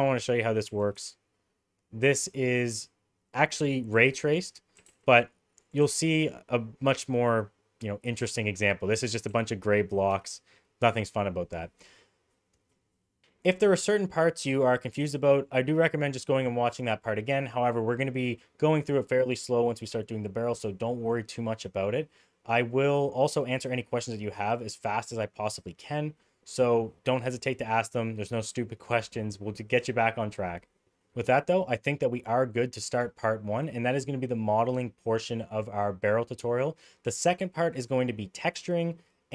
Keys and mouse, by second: 0.7 g, 4.8 g, 5.9 g, 9.3 g.